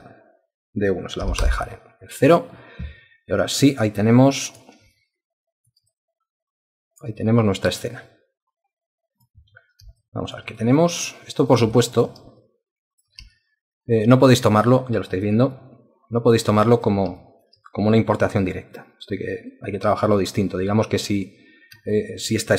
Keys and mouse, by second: 1.2 0, 1.4 Return, 3.8 alt+click, 4.9 alt+shift+click, 5.9 alt+click, 10.0 alt+shift+click, 10.6 alt+click, 11.7 alt+shift+click, 12.4 ctrl+alt+click, 13.3 alt+shift+click, 14.5 alt+click, 15.5 alt+click, 16.6 ctrl+alt+click, 17.2 alt+shift+click, 17.9 alt+click, 18.7 alt+click, 21.9 alt+click.